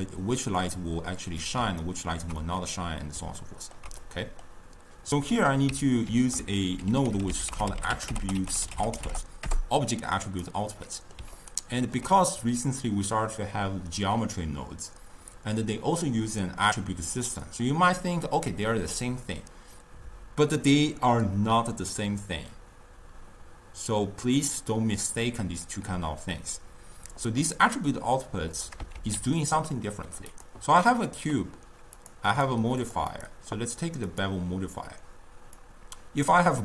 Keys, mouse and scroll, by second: 1.9-4.9 ctrl+middle drag, 6.1 ctrl+a, 8.3 t, 10.8-14.6 middle drag, 28.6 click, 29.0 shift+a, 32.0 click, 32.8 click, 33.2-36.6 drag.